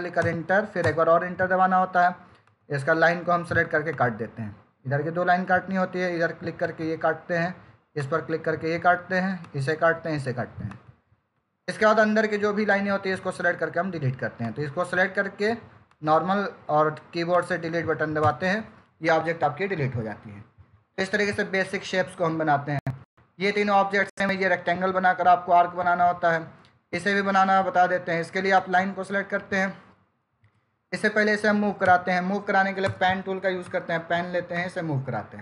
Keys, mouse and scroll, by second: 0.6 Return, 2.3 click, 6.5 click, 11.6 Escape, 14.3 click, 18.0 Delete, 28.4 click, 30.3 Escape, 31.7 p, 32.7 Return, 33.5 click.